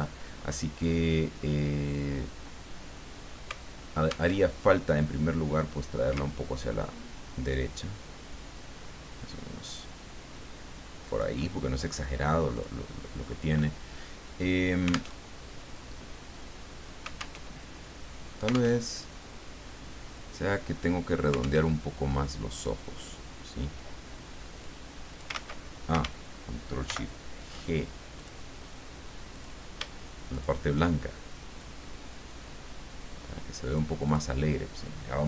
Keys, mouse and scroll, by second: 0.9-3.5 scroll down 3, 4.3 alt+Tab, 7.5-11.6 ctrl+drag, 12.5 click, 15.1 alt+Tab, 17.4 alt+Tab, 18.8 alt+Tab, 21.6 alt+Tab, 22.5 click, 24.6 click, 25.3 ctrl+z, 26.8 ctrl+shift+g, 28.2 click, 29.3 click, 30.3 shift+click, 31.6-34.0 drag, 34.0 middle click.